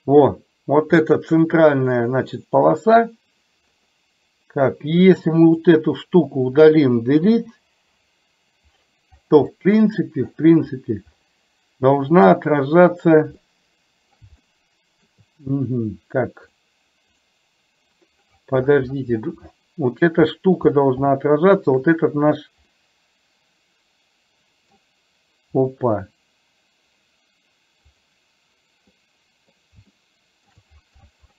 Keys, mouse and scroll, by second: 5.5 click, 7.5 Delete, 9.6-10.2 middle drag, 12.2 click, 13.6-14.2 middle drag, 14.5 shift+middle click, 19.6-20.1 middle drag, 21.2-21.9 shift+middle drag, 22.9-24.9 middle drag, 29.0 middle click, 30.0-30.5 shift+middle drag.